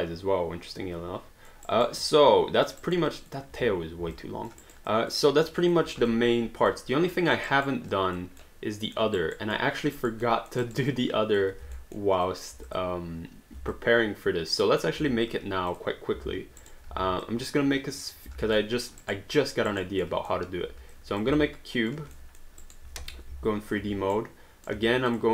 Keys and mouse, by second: 1.6 alt+right click, 2.0 alt+click, 2.8 alt+right click, 3.1 alt+click, 4.1 alt+click, 4.6 alt+right click, 4.9 alt+click, 7.2 alt+middle click, 7.5 alt+right click, 7.9 alt+click, 8.5 alt+middle click, 9.2 alt+right click, 9.5 alt+middle click, 9.9 alt+right click, 10.3 alt+middle click, 10.6 alt+right click, 11.7 alt+middle click, 12.3 alt+click, 12.7 click, 13.7 alt+click, 15.7 click, 16.7 alt+right click, 16.9 w, 17.2 click, 18.6 alt+middle click, 19.0 alt+right click, 19.4 alt+middle click, 19.7 alt+right click, 20.0 alt+middle click, 20.9 click, 21.7 alt+click, 22.1 alt+middle click, 22.6 alt+right click, 23.0 3, 24.1 right click, 24.8 q, 25.1 click.